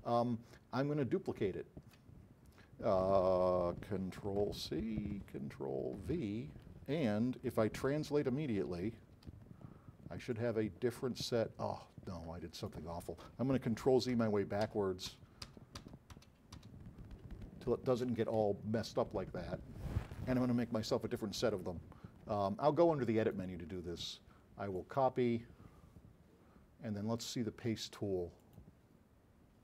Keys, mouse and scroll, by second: 1.0-2.1 alt+drag, 4.6 c, 6.0 v, 7.9 r, 8.8 e, 9.4 w, 14.3 z, 14.7 z, 15.3 z, 17.2 middle click, 17.2-17.6 scroll up 1, 18.3 z, 23.2 click, 24.8 click, 27.2 click, 28.5 click.